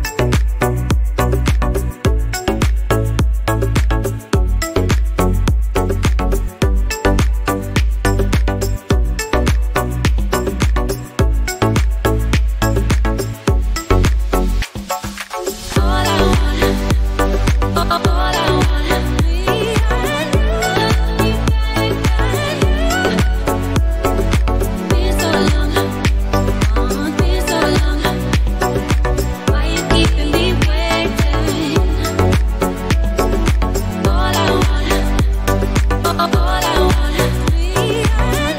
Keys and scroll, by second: 30.8 space.